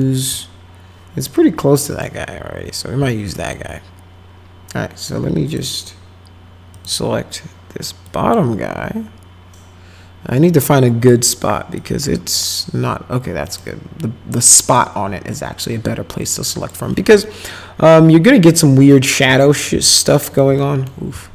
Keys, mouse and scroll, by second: 0.0 alt+middle click, 1.3 middle click, 3.1 alt+middle click, 5.5 click, 6.7 click, 8.1 click, 10.6 click, 11.8 click, 13.5 click, 16.2 click, 17.2-19.2 alt+middle drag, 19.4 middle click, 19.9 alt+middle click, 20.6 middle click, 21.2-21.3 alt+middle drag.